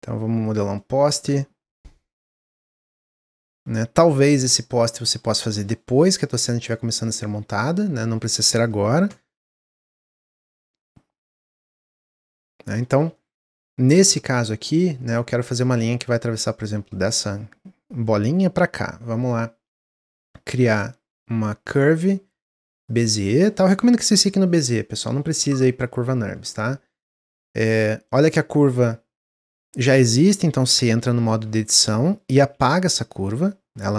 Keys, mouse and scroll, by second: 0.3 click, 0.6-1.7 middle drag, 1.7 click, 2.8-4.3 drag, 4.3-6.6 middle drag, 6.6-8.3 drag, 8.4 middle click, 9.0 Tab, 9.5 click, 10.4 s, 11.8 Tab, 11.9-12.4 middle drag, 12.4 scroll up 1, 12.7-16.4 middle drag, 16.8-19.7 middle drag, 19.7 click, 20.1 shift+a, 28.0 click, 31.2 Tab, 32.4 x.